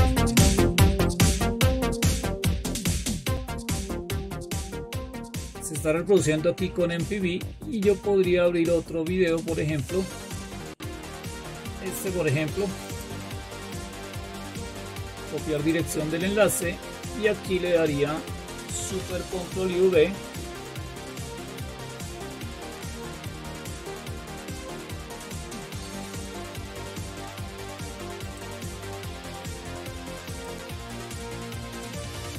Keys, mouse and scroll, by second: 1.0-1.5 scroll down 2, 3.3-4.8 scroll down 6, 4.8-10.6 scroll down 12, 12.8 right click, 15.6 click, 16.4 click, 20.0 ctrl+super+v, 23.6-24.6 scroll down 2, 27.0-28.2 scroll up 2, 28.2 click, 30.3-31.4 drag.